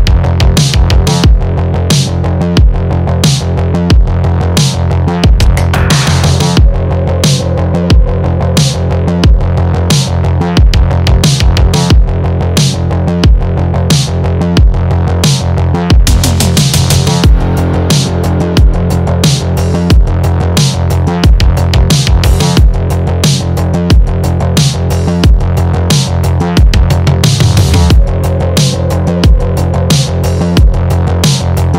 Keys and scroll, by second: 21.4 Return.